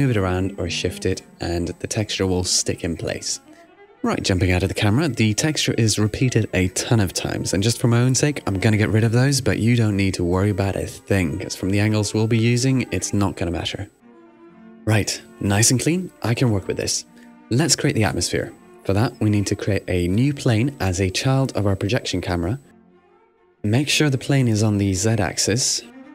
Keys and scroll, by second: 8.5 super+r, 11.2 shift+n, 12.3 n, 15.3 super+r.